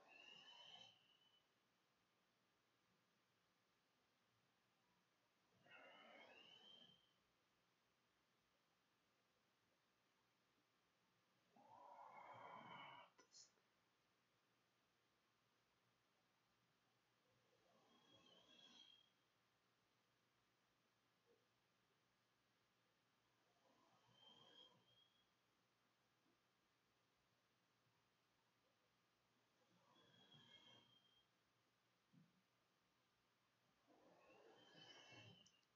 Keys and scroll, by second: 7.8 BackSpace, 8.0 Home, 8.9 End, 9.4 Delete, 10.2 Delete, 10.8 BackSpace, 17.7-19.4 typing, 20.5-21.5 typing, 22.5 Escape, 23.3 Escape, 23.4 `, 23.5 Tab, 27.8 ctrl+Escape, 27.9 ctrl+Tab.